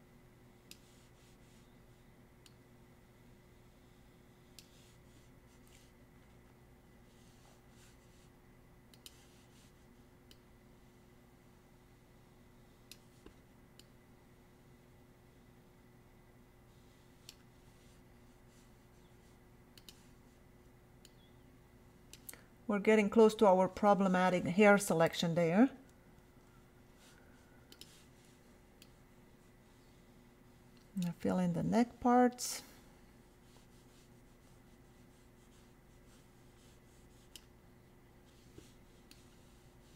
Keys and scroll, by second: 26.2 ].